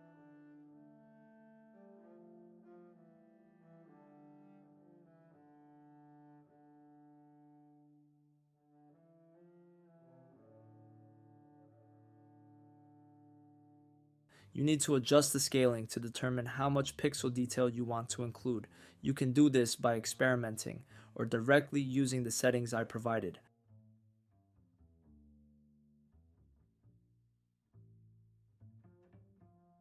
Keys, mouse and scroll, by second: 0.9 click, 1.2 shift+a, 5.6 click, 6.4 click, 7.8-8.4 drag, 8.7 click, 9.5 click, 10.2 shift+d, 10.5 click, 11.3 click, 11.6 shift+a, 15.0-16.2 middle drag, 17.0-23.2 drag, 27.3 click, 29.2-29.8 drag.